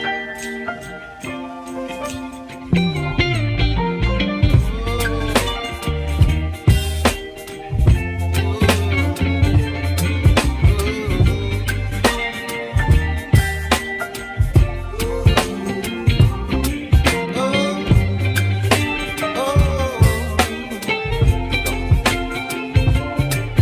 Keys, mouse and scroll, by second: 1.5 g, 11.0-23.6 drag.